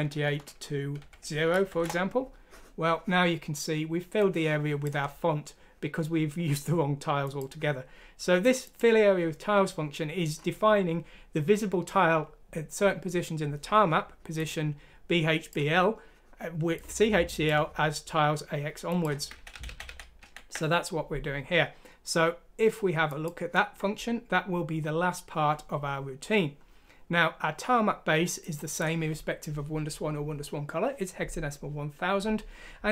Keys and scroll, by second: 1.0 0, 1.7 F6, 1.8 Return, 19.3 ctrl+z, 19.5 ctrl+z, 19.7 ctrl+z, 19.9 ctrl+z, 20.2 ctrl+z.